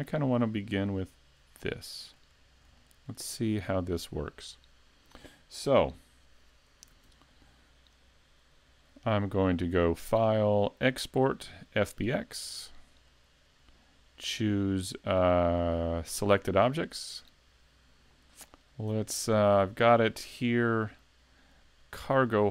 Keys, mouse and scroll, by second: 1.0 click, 1.6 shift+middle click, 2.4-2.8 scroll down 2, 2.8 shift+middle click, 3.3-3.7 scroll up 1, 3.7-4.1 scroll down 1, 4.1 shift+middle click, 7.0 s, 9.8 click.